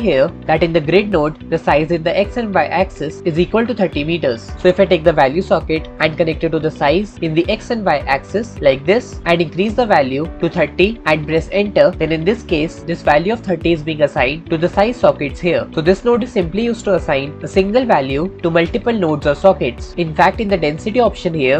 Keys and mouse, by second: 0.9 click, 6.0-7.6 drag, 8.4 click, 9.5-11.0 drag.